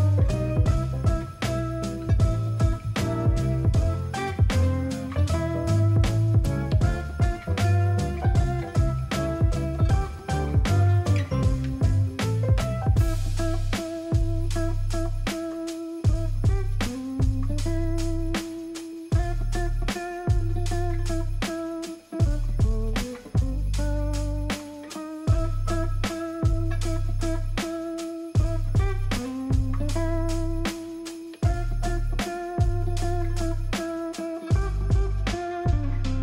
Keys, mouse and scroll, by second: 5.8 alt+scroll down 10, 6.9 alt+scroll down 1, 7.0-7.6 alt+scroll, 8.2 ctrl+0, 8.2-8.8 ctrl+scroll, 9.0-10.9 alt+scroll, 10.9 scroll, 16.6 alt+scroll up 3, 18.3-19.1 alt+scroll down 5, 21.2 alt+click, 22.5 ctrl+t, 26.2 ctrl+j, 29.9 alt+click, 32.9 ctrl+click, 33.4 ctrl+click.